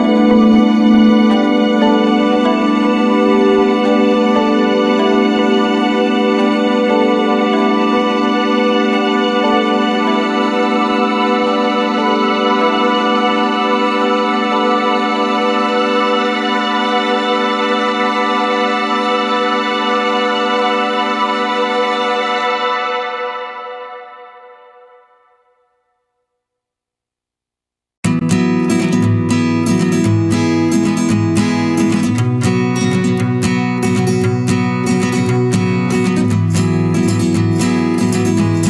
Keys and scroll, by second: 2.2 ctrl+-, 12.3 ctrl+=, 22.6 ctrl+z, 28.7 ctrl+z, 36.2 ctrl+-, 36.5 ctrl+0.